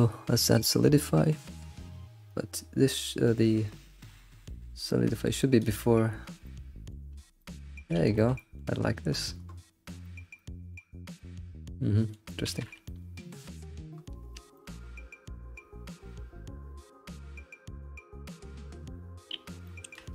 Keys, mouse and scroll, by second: 1.0-2.3 middle drag, 2.3-5.9 drag, 6.5-7.1 middle drag, 7.1 scroll down 2, 7.4-8.0 middle drag, 8.0 alt+shift+z, 8.2-9.1 shift+middle drag, 9.1-9.6 scroll up 4, 9.7-10.1 scroll down 5, 10.1-11.1 shift+middle drag, 11.1 scroll up 1, 11.2-12.5 middle drag, 12.5 alt+shift+z, 12.7 scroll down 3, 12.9-13.9 middle drag, 13.9 scroll up 4, 14.6 alt+middle click, 18.9-19.4 scroll down 5, 19.7-20.1 shift+middle drag.